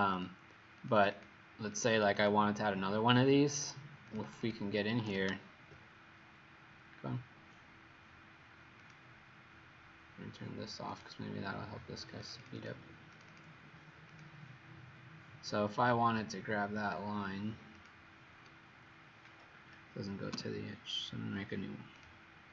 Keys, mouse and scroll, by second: 0.1 click, 0.9 click, 1.1 click, 1.2 click, 1.8 click, 2.0 click, 4.3 click, 4.6 click, 8.9 click, 12.5 click, 12.6 click, 13.2 click, 13.3 click, 14.4 click, 20.4 1, 22.1 click.